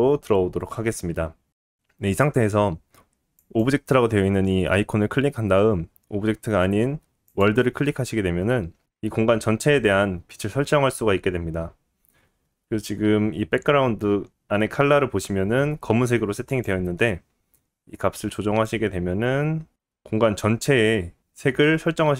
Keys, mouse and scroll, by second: 8.1-10.4 scroll up 4, 8.9 middle click, 16.6-22.1 middle drag.